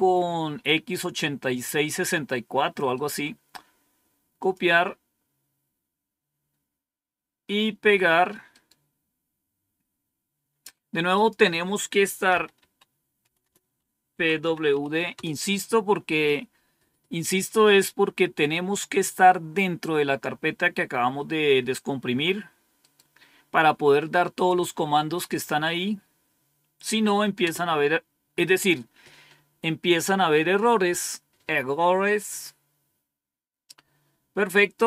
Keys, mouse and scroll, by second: 2.8 right click, 4.2 click, 8.3 right click, 11.0 click, 12.1-15.1 typing, 22.6 right click, 24.3 click, 27.3 Return.